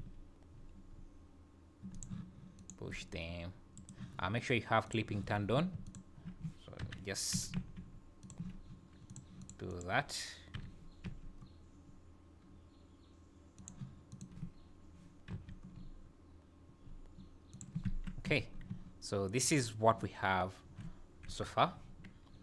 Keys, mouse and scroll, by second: 0.0 g, 2.6 click, 2.9 g, 4.9 click, 5.8 alt+click, 6.8 o, 7.3 g, 9.1 click, 9.4 click, 9.7 click, 10.6 o, 11.0 g, 14.1 click, 15.3 g, 17.9 Tab, 18.3 z, 18.6 scroll down 3, 18.7 `, 21.3 KP_1, 21.8 scroll up 2.